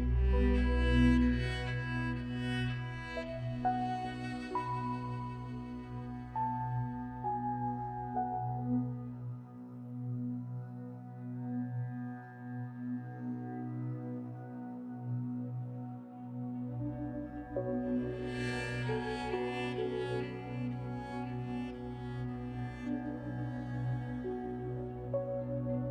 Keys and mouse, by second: 4.7 g, 14.6 click, 14.9 Tab, 15.6 Tab, 16.1 Tab, 16.6 1, 18.7 click, 19.2 g, 21.7 click, 22.1 g, 24.2 click, 24.3 g.